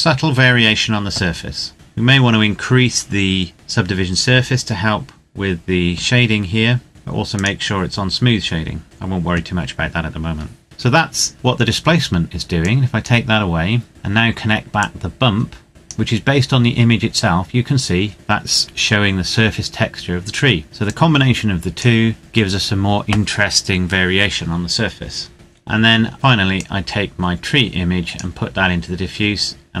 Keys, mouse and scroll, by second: 0.1-1.7 scroll up 1, 1.7 click, 6.9-7.4 scroll down 1, 7.4 click, 12.6 click, 14.7 click, 20.8 click, 25.3 middle click, 26.5 click.